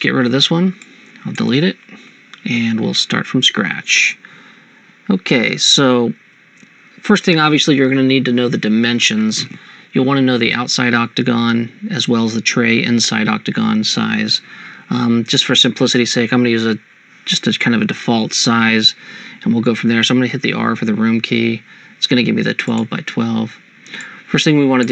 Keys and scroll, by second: 2.0 Delete, 21.4 r.